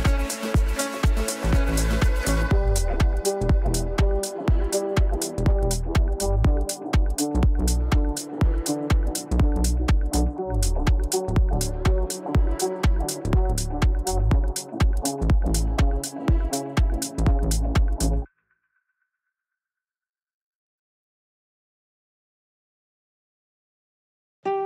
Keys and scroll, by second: 21.1 shift+Page_Up.